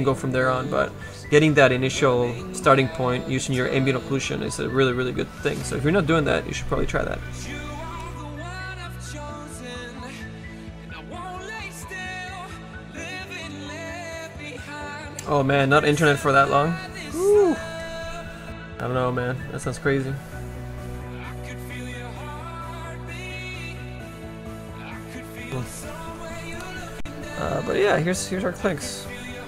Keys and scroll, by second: 17.3 4.